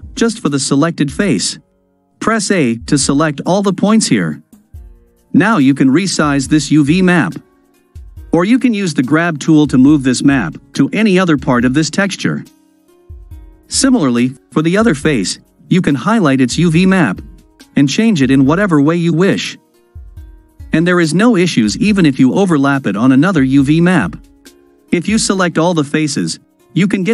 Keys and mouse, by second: 2.8 a, 5.7 s, 8.3 g, 13.1-14.1 middle drag, 14.9 click, 16.9 a, 17.7 s, 21.5 g, 25.9 a.